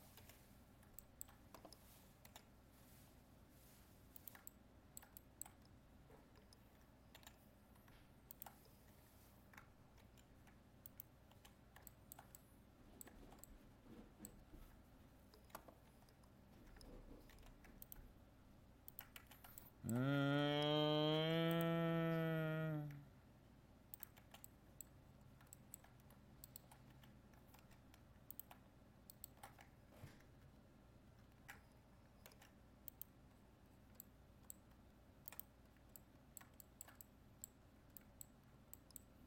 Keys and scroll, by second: 10.0 ctrl+f, 15.9 ctrl+t, 17.4 ctrl+r, 21.2 ctrl+r, 27.6 ctrl+Tab, 30.5 ctrl++.